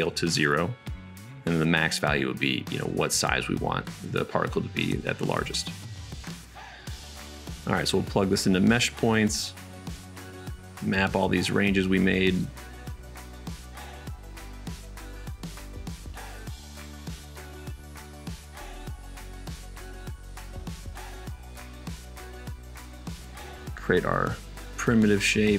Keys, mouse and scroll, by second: 3.4 KP_0, 9.0 right click, 9.9-11.7 middle drag, 11.8 shift+a, 11.9-14.8 drag, 14.8 right click, 15.1-23.3 middle drag, 23.6 shift+a.